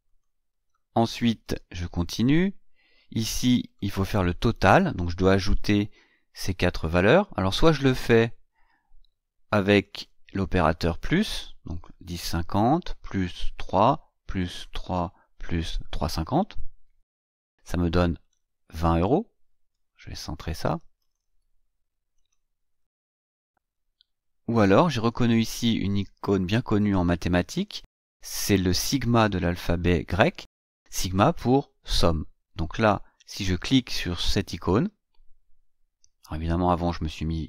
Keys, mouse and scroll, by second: 1.4 scroll down 1, 3.5 click, 9.5 click, 11.1 click, 12.4 KP_Add, 13.0 click, 13.8 KP_Add, 14.3 click, 14.9 KP_Add, 15.5 click, 16.8 Return, 18.0 click, 20.8 click, 21.9 click.